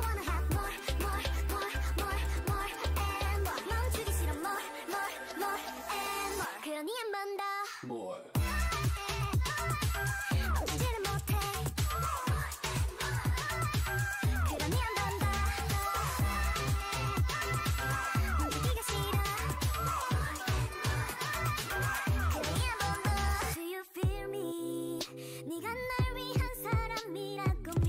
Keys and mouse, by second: 1.4 e, 2.4 e, 3.6 e, 4.3 e, 4.9 e, 5.6 e, 8.8 e, 9.8 e, 14.2 e, 14.9 e, 15.7 e, 17.0 e, 20.6-23.0 right drag, 23.3 Tab, 24.4 Tab, 25.4-26.9 drag, 26.9 g.